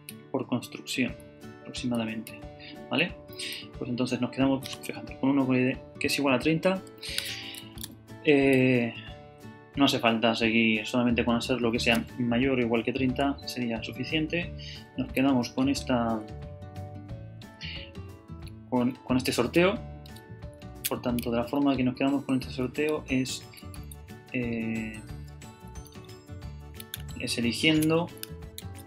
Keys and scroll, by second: 0.6 F9, 2.3 F9, 9.1 Right, 15.1 Down, 15.6 Left, 16.1 Up, 17.4 Left, 19.5 shift+super+Down, 20.1 shift+super+Right, 21.7 shift+super+Left, 22.9 super+Right, 23.0 shift+super+Down, 24.6 super+Down, 25.0 super+Down, 25.3 super+Up, 26.8 super+Down, 28.6 shift+super+c.